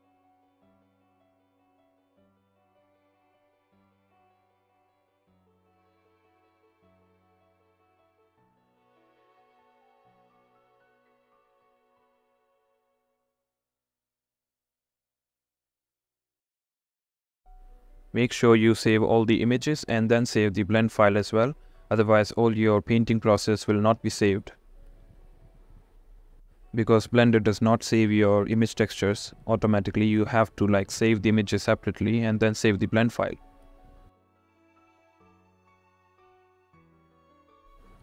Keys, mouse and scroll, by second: 15.3 click, 18.2-23.5 drag, 24.2-26.0 drag, 26.9 click, 27.7 click, 30.2 shift+click, 32.2 click, 33.8-34.9 drag, 35.6-36.7 drag, 37.4-38.0 drag.